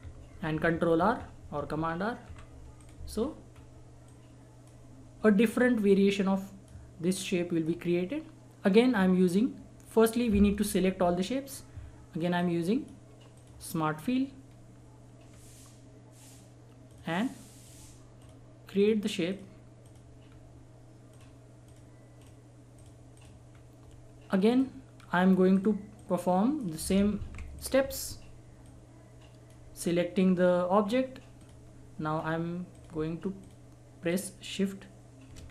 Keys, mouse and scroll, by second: 0.0 ctrl+r, 2.8 click, 3.2-3.5 scroll down 1, 3.5 scroll up 1, 4.1-13.4 drag, 13.9 scroll up 1, 16.9 click, 20.2 scroll down 1, 21.1 click, 23.5 scroll down 1, 24.4 click, 24.9-25.5 scroll down 1, 25.5 click, 27.1 ctrl+z, 27.5 click, 29.8 scroll up 1, 31.4 click, 32.2 scroll up 1, 32.7 click, 35.4-35.5 scroll down 1.